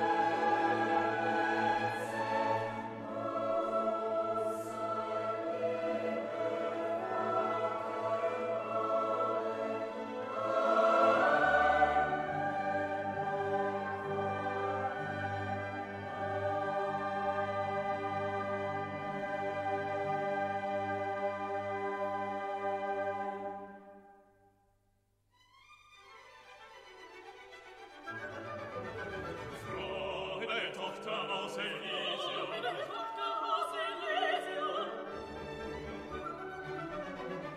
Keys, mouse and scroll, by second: 1.7 click, 8.3-15.0 drag, 15.3 middle click, 16.3 click, 17.8 click, 21.2 click, 23.1 middle click, 24.3 click, 25.4 click, 30.3 click, 35.7-37.5 drag.